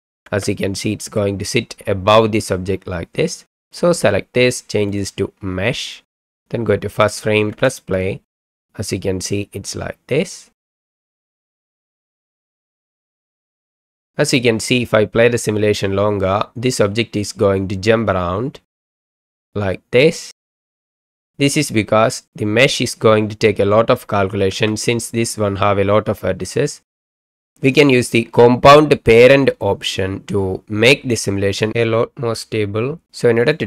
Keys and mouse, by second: 0.3 space, 0.5-1.2 middle drag, 5.0-5.9 drag, 7.5 space, 24.5 space, 27.8-30.2 drag.